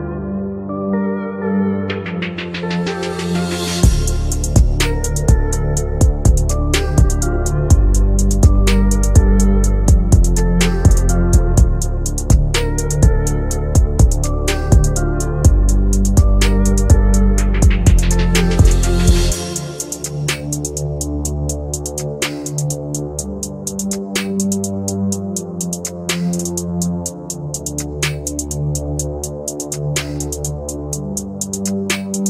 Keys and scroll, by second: 31.5 Escape.